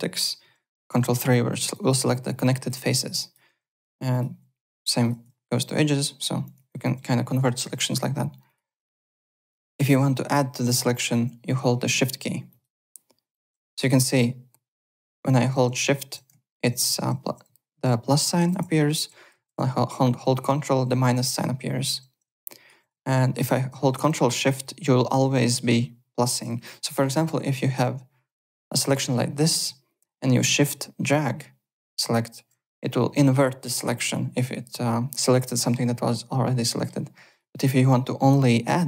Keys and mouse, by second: 0.9 ctrl+3, 1.5 alt+click, 2.4 alt+click, 3.2 alt+click, 3.3-4.8 typing, 4.1 click, 5.0 click, 5.5 ctrl+2, 6.7 alt+click, 7.6 alt+Tab, 8.4 alt+click, 9.3 click, 10.6 click, 10.9 alt+click, 12.5 n, 12.5 shift+click, 13.3 shift+click, 13.9 click, 22.4 alt+click, 26.8 alt+middle click, 28.2 shift+click, 30.3 shift+click, 36.6 middle click, 37.3 click.